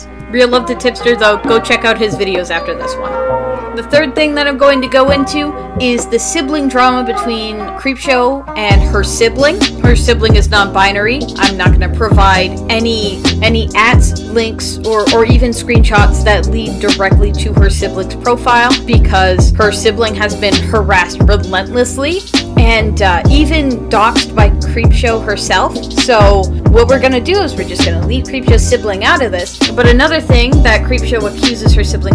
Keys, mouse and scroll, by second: 0.9 space, 2.0 space, 2.9 space, 4.5 space, 5.8 space, 7.1 space, 8.8 space, 10.3 space, 11.1 space, 13.8 space, 16.0 space, 19.8 space, 24.0 space, 26.0 [, 26.7 space, 28.0 space, 29.0 space.